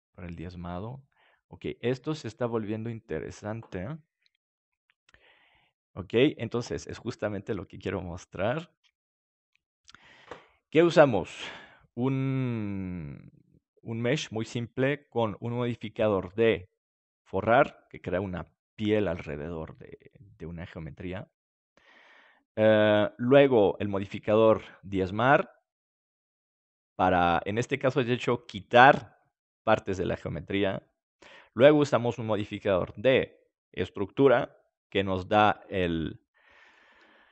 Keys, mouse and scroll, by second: 4.0-7.2 middle drag, 12.5-17.8 middle drag, 23.2-28.5 middle drag, 35.7-37.3 middle drag.